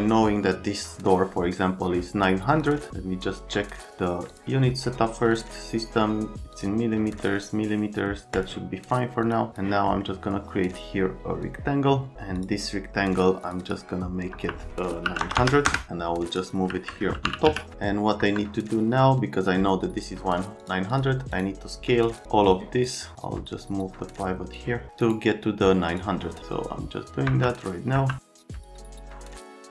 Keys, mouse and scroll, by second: 15.0 KP_9, 15.2 KP_0, 15.3 KP_0, 15.6 KP_Enter, 15.9 Num_Lock, 17.0-17.9 typing, 18.2 F3, 20.6 click, 20.9 click, 22.2 click, 25.9 click, 28.6 middle click, 28.7 right click, 29.0 right click, 29.1 click, 29.4 click, 29.5-29.7 typing.